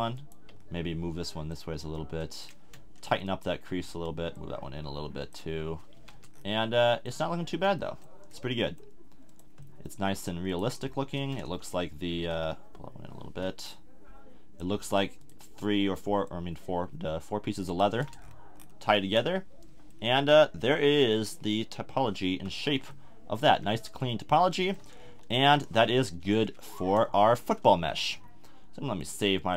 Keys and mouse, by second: 0.7-1.8 middle drag, 5.9 a, 6.1 Tab, 8.3 Tab, 9.3-11.5 middle drag, 17.9 a, 18.0 Tab, 22.5 z, 23.5 a, 25.0 KP_1, 27.1 z.